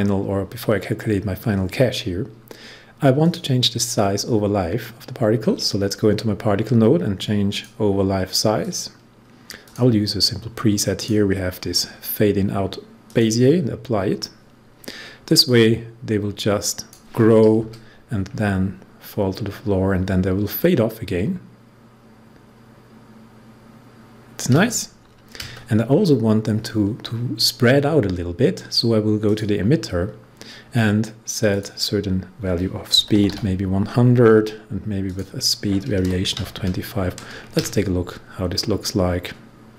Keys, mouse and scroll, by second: 3.1 click, 3.9 scroll down 1, 7.4 click, 9.6 click, 15.4-19.3 drag, 29.2 click, 32.7-33.7 typing, 35.0 click, 35.9-36.3 typing.